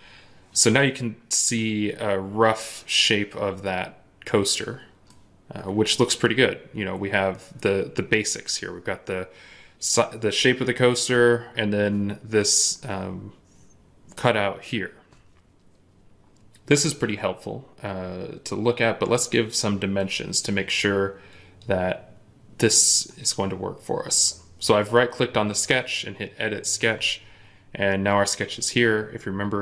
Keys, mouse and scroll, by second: 1.4 middle click, 19.9 right click.